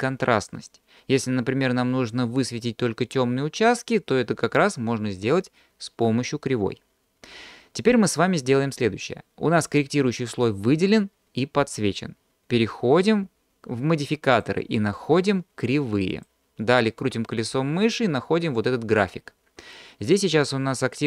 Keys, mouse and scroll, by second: 14.3-16.4 drag, 17.1-18.0 scroll down 5.